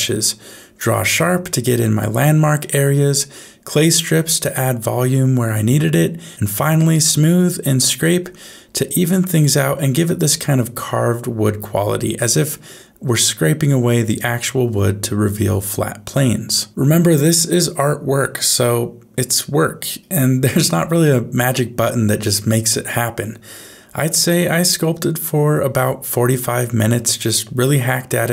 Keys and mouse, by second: 0.4 right click, 0.9 right click, 1.5 right click, 2.0 right click, 2.5 right click, 2.9 right click, 3.5 right click, 4.0 right click, 4.3 right click, 4.6 right click, 6.2 right click, 7.1-8.9 right drag, 9.1-10.2 right drag, 10.5 middle click, 10.9 middle click, 11.7 middle click, 12.7 middle click, 13.0 ctrl+click, 13.6-15.1 ctrl+middle drag, 15.4 ctrl+middle click, 15.9-20.0 ctrl+middle drag, 20.4 shift+middle click, 21.0 middle click, 24.2 middle click, 25.4-26.4 middle drag, 26.8-28.3 shift+middle drag.